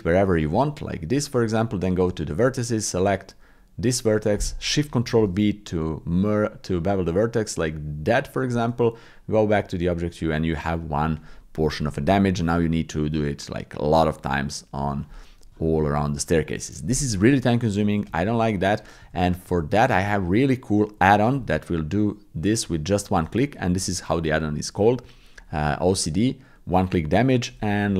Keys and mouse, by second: 0.8 click, 1.4 Tab, 5.1 ctrl+shift+b, 8.7 Tab, 15.5 shift+click, 18.1 ctrl+z, 18.3 ctrl+z, 19.0 ctrl+z, 19.5 ctrl+z, 19.9 ctrl+z, 21.1 shift+click, 21.4 click, 22.6 Tab, 23.6 shift+click.